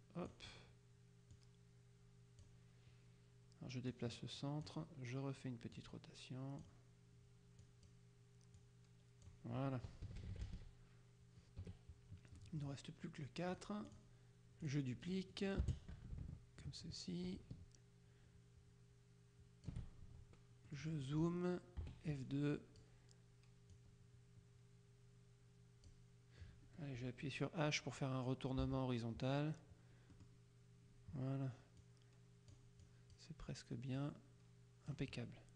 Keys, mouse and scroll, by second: 1.5-3.1 drag, 4.0 click, 5.9 click, 7.7 click, 8.7 click, 10.1 KP_Subtract, 11.7 KP_Subtract, 12.5 click, 12.7 middle click, 13.6 click, 14.7 click, 15.6-20.3 drag, 15.7 space, 20.7 middle click, 21.3 click, 21.9 F2, 22.3-23.3 drag, 23.8-26.5 drag, 28.7 h, 30.2 click, 31.9 click, 34.0 click.